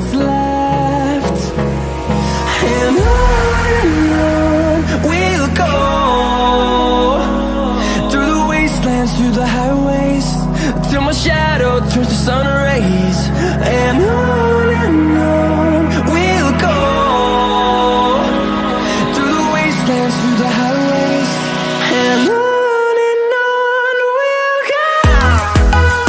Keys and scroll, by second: 4.0 ctrl+z, 11.1 space, 11.5 space, 13.4 ctrl+d, 15.6 space, 16.1 space.